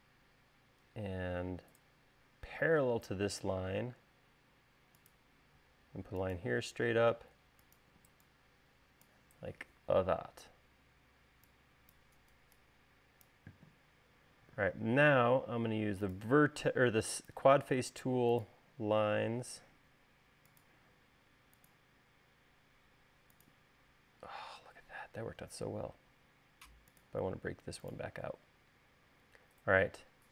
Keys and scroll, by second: 5.9 l, 8.5 e, 19.6 l, 27.0 l.